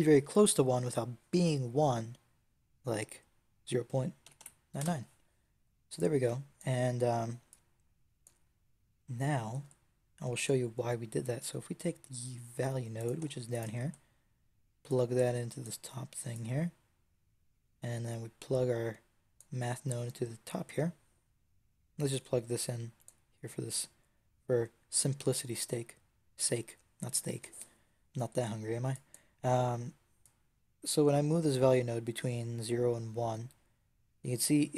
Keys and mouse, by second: 4.2 KP_9, 4.7 KP_3, 5.8 click, 10.2 shift+a, 15.5-21.8 drag, 22.0-28.8 drag, 30.1-34.7 drag.